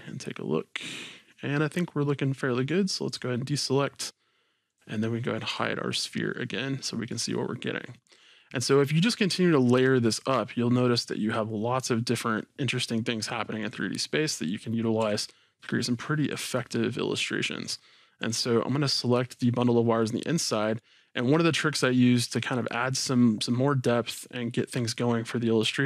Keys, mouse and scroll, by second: 0.2-3.1 middle drag, 3.1 click, 4.7 click, 5.5 h, 6.1-13.6 middle drag, 13.6 click, 15.0 s, 16.3 click, 16.6-18.2 middle drag, 17.7-18.2 scroll down 1, 18.2 scroll down 1, 18.2 click, 19.1 scroll down 1, 20.0-24.0 middle drag.